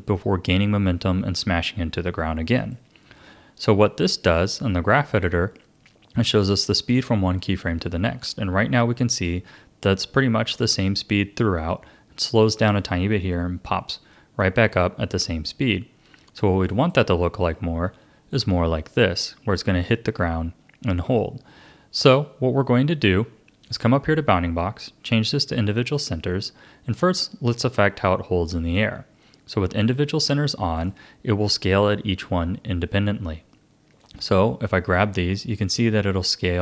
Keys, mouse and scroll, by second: 2.6-7.0 drag, 16.7 click, 17.7 s, 23.6-26.7 drag, 29.8-32.8 drag, 34.0 click, 35.2 s.